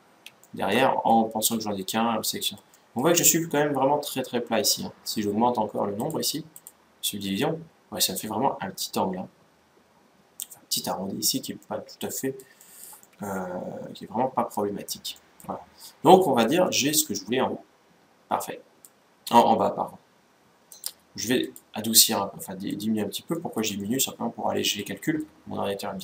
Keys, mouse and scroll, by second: 0.1-4.0 middle drag, 4.4-5.5 scroll up 1, 5.7-7.9 drag, 7.1-8.9 middle drag, 11.3-14.5 middle drag, 14.5-14.9 scroll down 1, 14.9-17.9 middle drag, 20.5-24.0 drag, 23.1-26.0 middle drag.